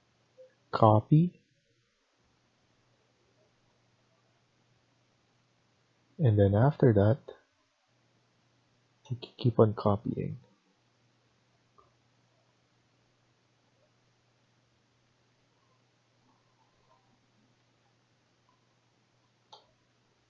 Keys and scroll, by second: 5.7 Escape, 6.0 Escape, 16.7 ctrl+z, 17.5 Escape, 17.7 Escape.